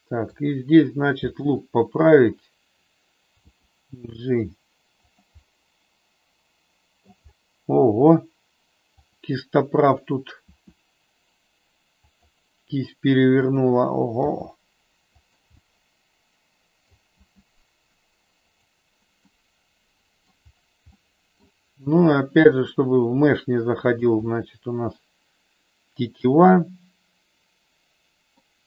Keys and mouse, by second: 1.4 click, 3.4 g, 5.4-7.0 middle drag, 9.0 click, 10.4 r, 12.1 click, 14.2 g, 15.2 click, 15.5-16.8 middle drag, 17.1 g, 19.2-20.4 middle drag, 21.0 middle click, 22.5 r, 23.8 click, 24.2-28.4 middle drag.